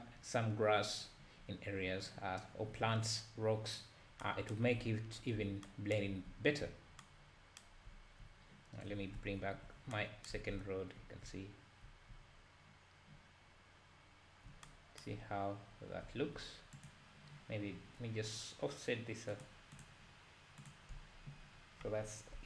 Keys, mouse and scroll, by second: 9.4 alt+h, 10.4 alt+a, 15.3-15.7 scroll up 1, 15.7-16.1 scroll down 1, 16.8 click, 19.4 click.